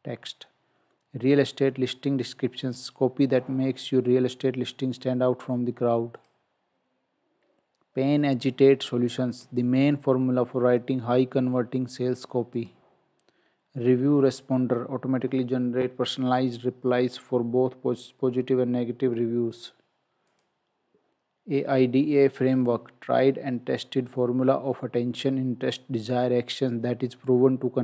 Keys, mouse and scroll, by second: 6.2 click, 12.6 click, 20.3 click.